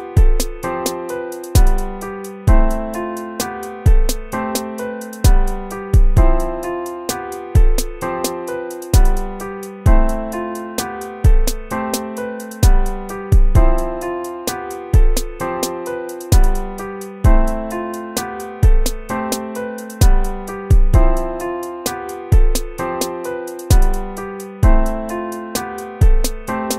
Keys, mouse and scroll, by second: 8.1 ctrl+-, 17.4 ctrl+-, 18.4 ctrl++, 25.8 ctrl+-, 26.0 ctrl+-.